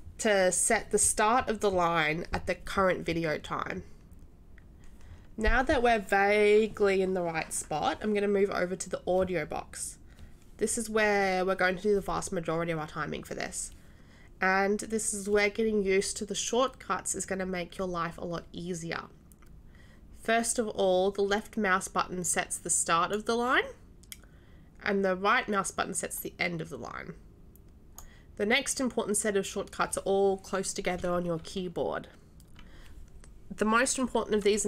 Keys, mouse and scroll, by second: 22.7 click, 26.1-28.0 right drag.